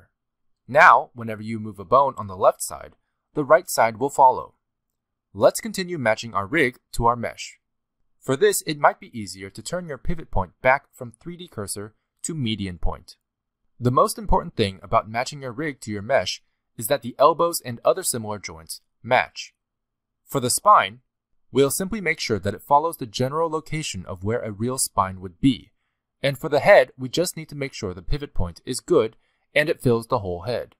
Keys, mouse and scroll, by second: 0.2 click, 1.8 n, 2.9 g, 6.7 shift+middle click, 7.2-7.6 scroll up 3, 7.4 g, 8.1 r, 10.6 click, 14.0 r, 15.3-17.6 typing, 16.5 shift+middle click, 16.6 scroll up 2, 18.2 middle click, 18.3 shift+middle click, 18.4 scroll down 1, 18.6 click, 18.7-23.4 typing, 19.2 click, 19.6 shift+middle click, 19.7 scroll up 1, 20.1 scroll down 1, 20.2 alt+a, 20.5 shift+middle click, 20.9 middle click, 21.1 middle click, 21.7 scroll down 3, 22.3 click, 22.7 shift+click, 22.7 shift+middle click, 22.9 scroll down 1, 24.1 shift+middle click, 24.2 click, 24.3 shift+middle click, 24.4 scroll up 1, 24.8 click, 25.3-30.7 typing, 25.7 click, 26.0 click, 26.2 shift+middle click, 26.7 shift+middle click, 27.4 click, 28.5 click, 29.8 shift+middle click, 29.8 scroll down 4, 30.4 click.